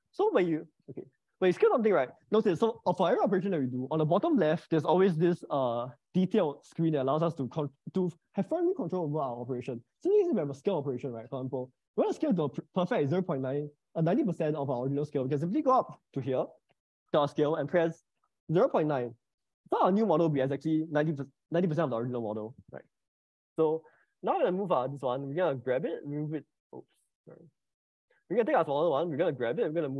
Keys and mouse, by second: 1.4-19.6 drag, 26.0 g, 27.6 Escape, 27.6 click, 29.2 g.